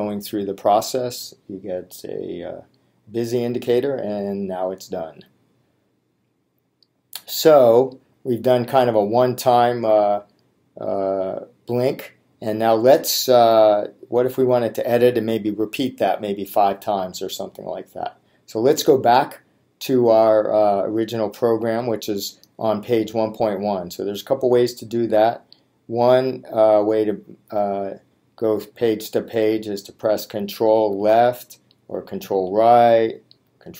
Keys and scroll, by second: 31.2 Left, 32.6 Right.